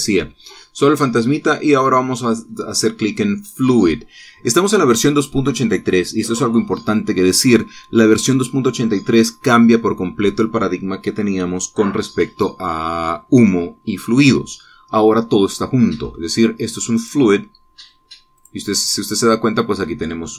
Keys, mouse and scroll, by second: 17.8 click, 19.2 click.